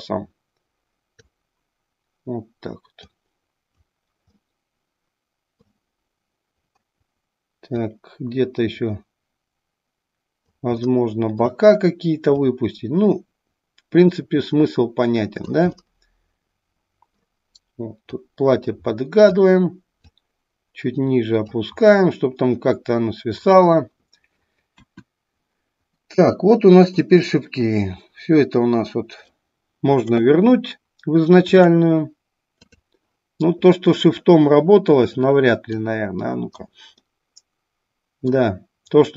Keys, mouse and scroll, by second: 3.2 click, 4.4-5.7 middle drag, 7.8-10.9 drag, 11.0 middle click, 12.5-15.6 drag, 15.7-17.1 middle drag, 18.1-19.4 drag, 20.4-21.7 drag, 22.0-23.7 middle drag, 27.0-29.5 drag, 31.7-33.0 drag, 35.7-36.7 drag, 37.1-38.5 middle drag.